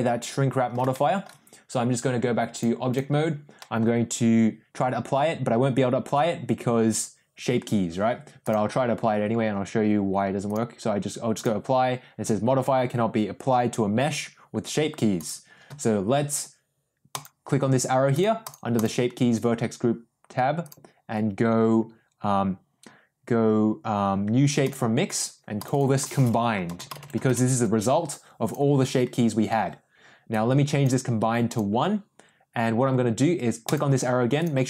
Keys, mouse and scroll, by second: 0.9 middle click, 2.6 click, 3.5 middle click, 8.4 click, 10.5-14.2 drag, 15.2 click, 17.1 click, 18.4 click, 20.7-24.9 drag, 25.6-27.8 drag, 30.2 click, 31.5 click, 33.6-34.1 drag.